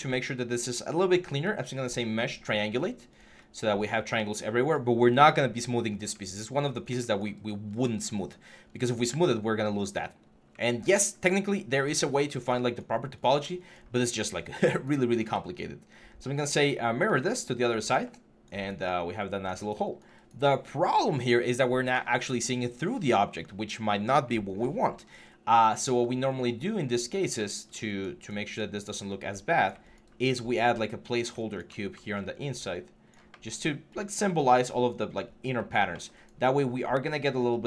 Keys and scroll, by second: 8.8 3, 10.0 1, 26.8 w.